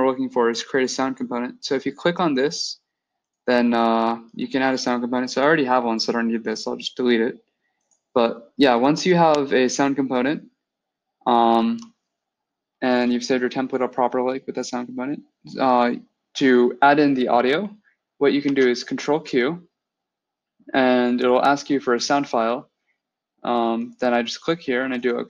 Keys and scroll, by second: 18.3 ctrl+q.